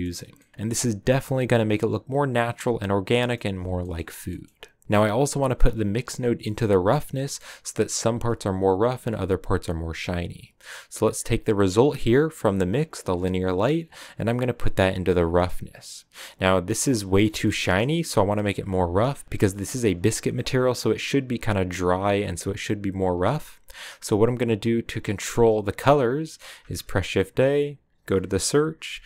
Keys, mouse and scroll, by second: 3.5 a, 4.8-9.6 drag, 11.1 click, 17.3 shift+middle click, 17.5-17.9 scroll up 2.